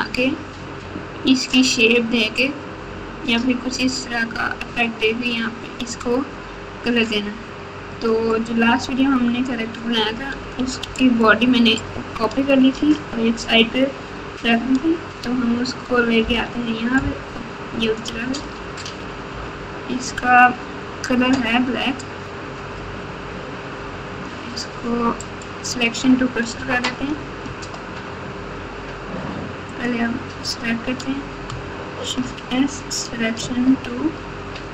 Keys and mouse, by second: 8.0 click, 10.5 x, 16.2 ctrl+v, 18.4 g, 29.8 click, 32.2 shift+s.